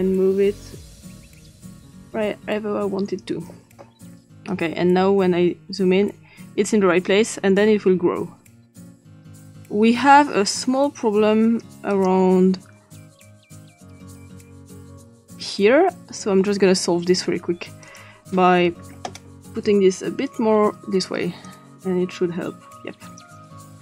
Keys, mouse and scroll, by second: 0.9-3.3 drag, 4.5-11.6 drag, 11.9 click, 14.0-14.4 drag, 15.2 click, 17.8 click, 19.6 click, 21.4-23.2 drag.